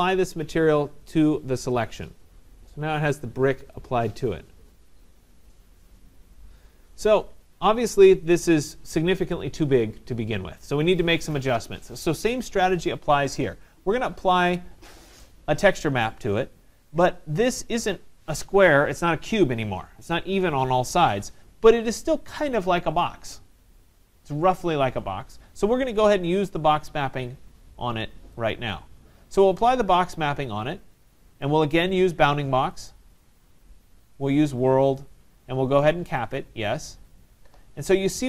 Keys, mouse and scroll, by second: 1.7 click, 3.2 click, 7.0 right click, 11.3 right click, 14.7 right click, 28.5-30.2 drag, 32.9 click, 35.1 click, 36.3 click.